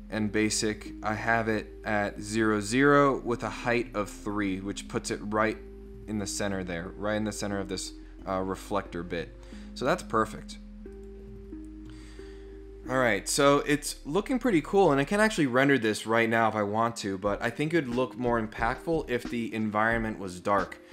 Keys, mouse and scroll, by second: 1.8 click, 10.9 click.